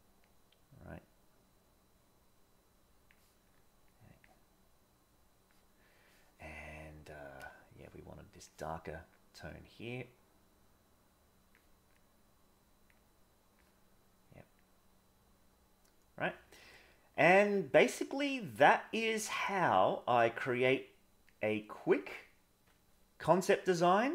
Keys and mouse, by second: 0.3-3.1 drag, 3.9 click, 9.5-11.5 drag, 12.0 click, 14.6-16.2 drag, 17.2 click, 18.3 click, 19.5 click, 21.3 click, 23.8-24.1 drag.